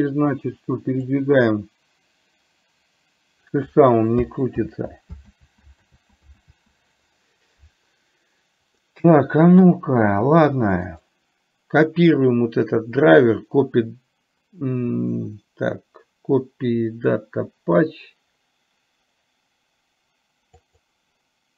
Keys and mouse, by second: 1.1-3.6 drag, 4.7 ctrl+z, 9.0-9.7 middle drag, 11.0-20.9 right drag.